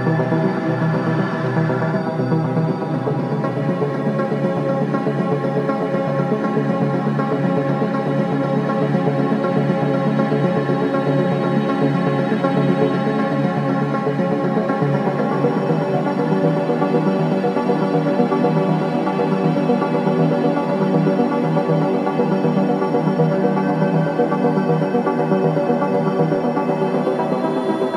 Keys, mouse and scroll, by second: 1.1-3.4 typing, 4.9 typing, 6.0 click, 10.0 right click, 10.3 click, 11.1-11.9 scroll up 1, 17.1 click, 18.2 right click, 19.3 click, 22.2 click, 22.7 right click, 27.3 right click.